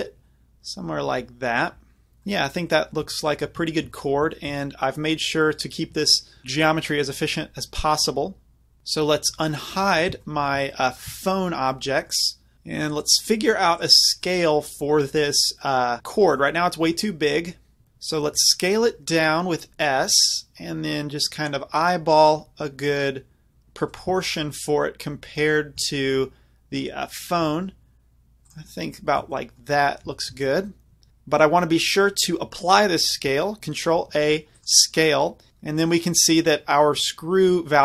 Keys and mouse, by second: 2.3-3.1 middle drag, 3.7 middle drag, 9.0-10.2 middle drag, 9.7 alt+h, 10.5 z, 12.5 ctrl+z, 15.7-16.4 middle drag, 16.8 middle click, 17.1 middle drag, 17.8 ctrl+z, 18.5 ctrl+z, 18.7 s, 24.0-27.4 drag, 27.4-28.5 middle drag, 27.4 s, 28.5 drag, 29.4 middle click, 30.3 middle click, 30.6-34.0 middle drag, 34.0 ctrl+a.